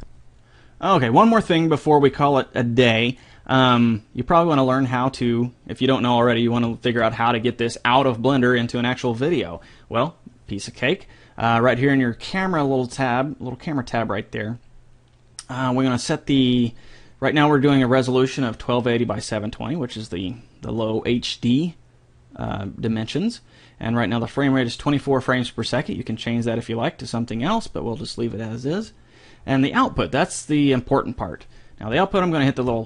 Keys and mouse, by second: 25.6-27.4 drag, 32.7 click.